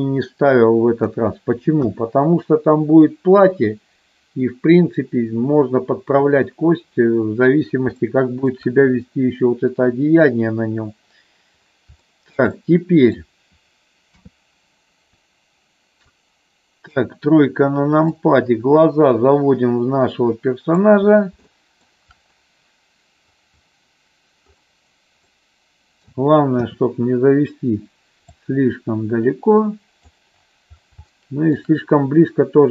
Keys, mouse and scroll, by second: 1.8 KP_1, 8.0 shift+middle click, 12.1 shift+middle click, 12.6 middle click, 14.1 KP_3, 16.0 click, 18.1-20.9 drag, 21.4 shift+middle click, 25.3 middle click, 26.5 KP_3, 28.1-30.1 drag, 31.1 shift+middle click.